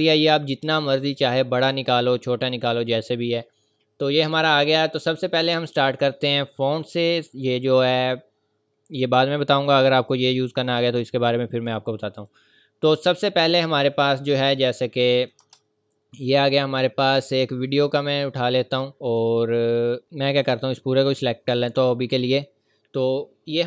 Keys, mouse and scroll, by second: 1.5 scroll up 1, 12.2 click, 15.1 click, 15.4 Return, 16.1 click, 20.0 z, 20.4 click, 23.0 click.